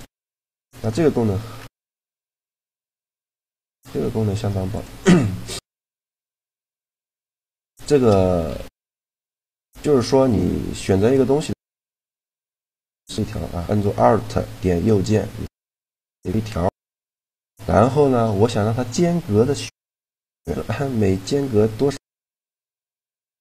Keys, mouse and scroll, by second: 0.2-1.3 drag, 1.3 Tab, 2.0 x, 3.1 shift+a, 5.2 s, 6.0 s, 6.7 Tab, 8.2 w, 10.5 a, 12.5-14.1 right drag, 15.1-16.4 right drag, 16.4-19.8 middle drag, 20.0-21.7 middle drag.